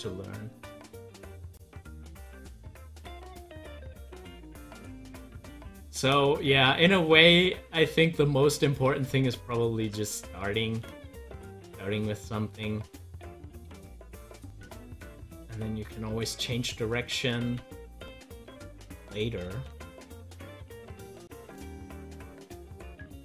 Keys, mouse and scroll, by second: 3.7 z, 4.4-9.0 drag, 9.0 ctrl+z, 12.0-14.9 drag, 14.9 ctrl+z, 17.4 ctrl+z, 19.8 ctrl+z, 22.2-23.2 drag.